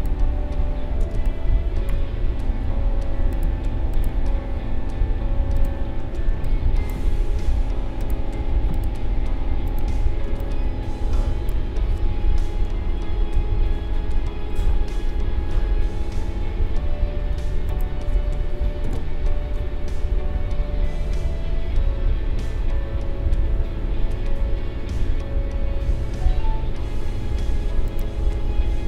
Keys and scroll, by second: 1.1 space, 6.3 space, 10.2 space, 12.7 ctrl+-, 13.7 ctrl+0, 18.8 Delete.